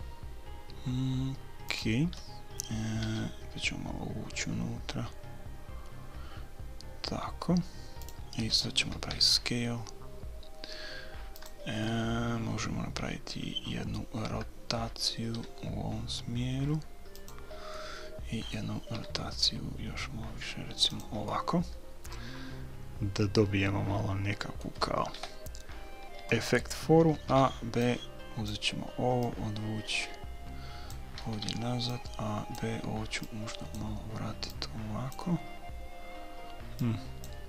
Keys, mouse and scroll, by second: 3.0 g, 9.1 s, 11.8-13.9 middle drag, 15.3 r, 17.8-19.6 middle drag, 19.0 r, 21.3-23.4 middle drag, 25.2 KP_3, 27.1 a, 27.4 b, 29.2-31.2 drag, 31.2 a, 31.5 b, 33.2-36.4 drag, 36.8-37.4 drag.